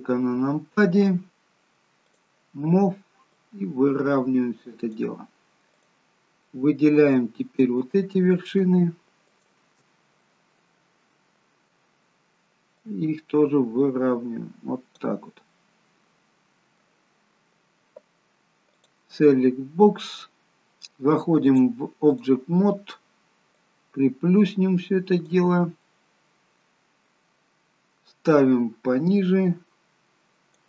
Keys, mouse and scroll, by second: 2.1 click, 3.3 click, 6.4 click, 6.4 middle click, 7.8 middle click, 9.3 shift+click, 10.1 middle click, 12.7 click, 15.4 middle click, 18.7 click, 21.4 click, 25.7 click, 25.7 middle click, 28.3 click.